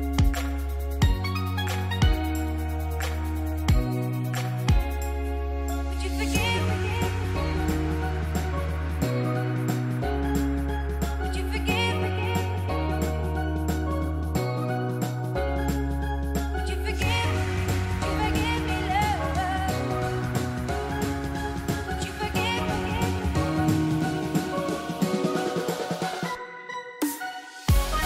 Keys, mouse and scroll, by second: 0.1 space, 0.7-28.0 drag.